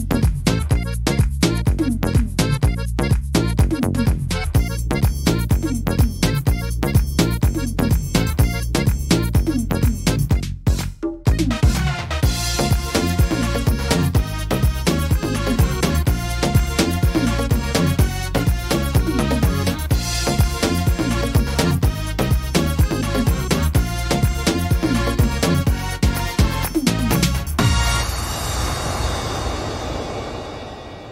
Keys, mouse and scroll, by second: 0.3 middle click, 1.1 shift+middle click, 1.5 scroll up 4, 2.0 shift+middle click, 2.5 middle click, 3.1 shift+middle click, 4.2 right click, 4.9 shift+right click, 5.7 click, 8.1 s, 9.8 middle click, 10.5 middle click, 11.1 shift+middle click, 11.3 shift+middle click, 11.5-11.9 scroll up 4, 12.0 shift+middle click, 12.9 right click, 13.9 click, 14.8 middle click, 16.5 middle click, 18.3 l, 18.7 middle click, 19.9 click, 26.1 ctrl+z, 26.7 middle click, 27.2 scroll down 4, 27.6 middle click, 28.2-28.7 scroll down 5, 29.0 middle click, 29.7 scroll up 2, 30.1 middle click, 30.5 shift+middle click.